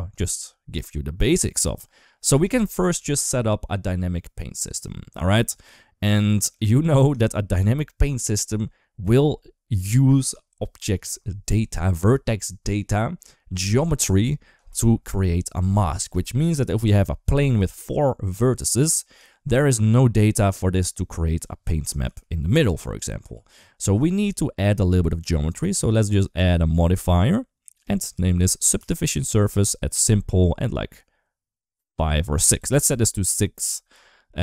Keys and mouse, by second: 6.9 click, 16.6 Tab, 18.7 Tab, 19.1 shift+middle click, 19.7 d, 19.9-21.2 drag, 21.2 d, 21.8 ctrl+z, 22.2 d, 22.4 click, 23.0 d, 23.1 ctrl+z, 27.0-28.6 drag, 30.4-33.0 drag.